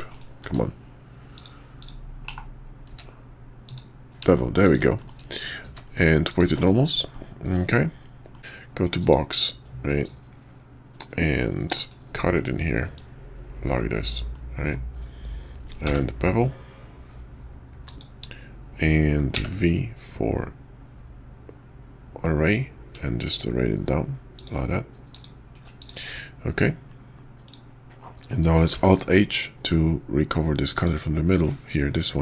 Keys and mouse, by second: 0.1-1.0 drag, 1.3 click, 1.8 click, 2.2 /, 2.9 q, 5.0 shift+middle click, 5.6 q, 6.7 KP_5, 7.5 middle click, 8.3 click, 8.4 d, 10.0-11.9 drag, 12.9-18.0 drag, 25.8 click, 27.5 click, 28.7 alt+h, 30.7 click, 31.3 middle click.